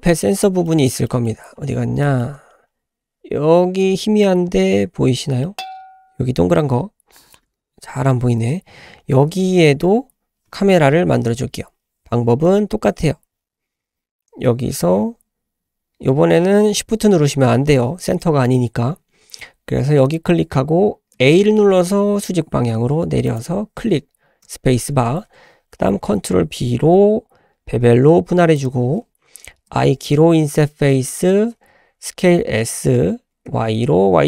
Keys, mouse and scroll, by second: 0.2 shift+middle click, 0.7 shift+middle click, 1.1 shift+middle click, 1.5-1.9 scroll down 4, 2.0 shift+middle click, 2.4-3.5 scroll up 3, 3.5-3.8 scroll up 2, 4.0 shift+middle click, 4.4-5.0 scroll up 1, 5.4 shift+middle click, 6.9 scroll up 1, 7.2-7.5 scroll down 3, 7.7-9.3 scroll up 4, 7.8 s, 26.2 ctrl+b, 31.1 i, 32.1 s.